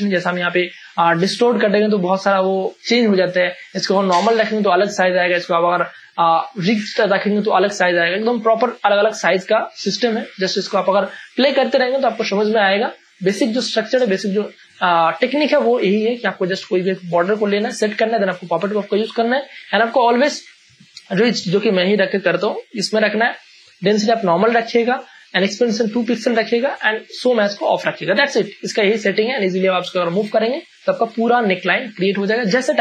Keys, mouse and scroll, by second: 1.3 click, 3.8 click, 10.6 ctrl+space, 10.8 ctrl+click, 10.9 ctrl+click, 11.2 ctrl+space, 11.8 space, 13.2 space, 13.3-19.9 ctrl+drag, 23.5 click.